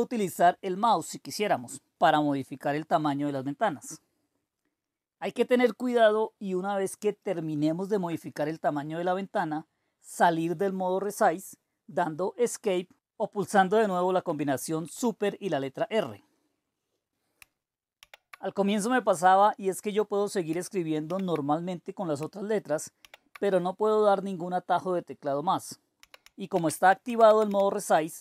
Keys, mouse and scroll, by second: 4.7-13.0 drag, 14.8 Escape, 18.0 super+r, 21.1 super+r, 23.0 super+r, 24.9-26.5 drag, 25.8-27.9 typing.